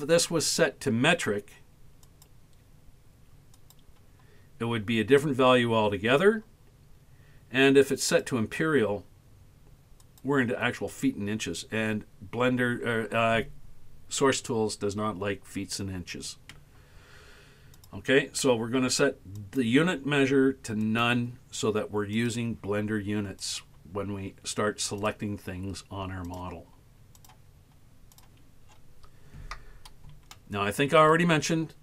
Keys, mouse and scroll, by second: 2.1-3.8 drag, 8.1-10.3 drag, 17.8-18.3 drag, 19.4 click, 22.2 click, 23.5 click, 25.0 click, 26.3 click, 27.2 click, 28.2 click, 28.7 scroll down 7, 30.4 shift+middle click.